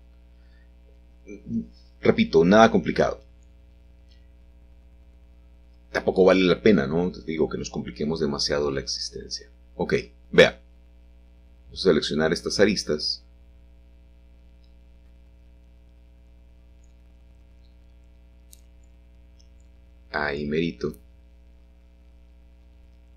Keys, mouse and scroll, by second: 4.4 click, 6.8 click, 7.6 shift+click, 8.6 shift+click, 9.5 ctrl+z, 10.4 shift+click, 11.2 shift+click, 12.6 shift+click, 13.6 shift+click, 15.2 shift+click, 17.6 shift+middle click, 18.8 shift+middle click.